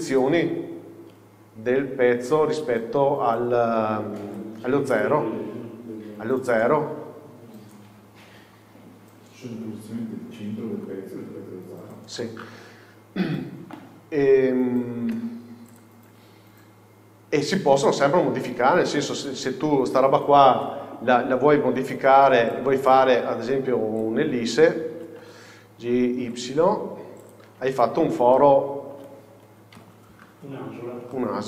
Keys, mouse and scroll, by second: 9.0-9.4 scroll down 1, 16.2 Tab, 16.6 scroll down 1, 17.9 scroll up 1, 18.8 scroll down 2, 19.6 scroll up 1, 20.8 KP_4, 22.6 click, 23.8 click, 27.4 click, 27.7 Tab, 28.0-28.4 scroll down 2, 28.4-29.9 middle drag, 29.1-29.5 scroll up 2, 29.5 z, 29.9 KP_6, 30.9-31.2 scroll down 1, 31.2 middle click.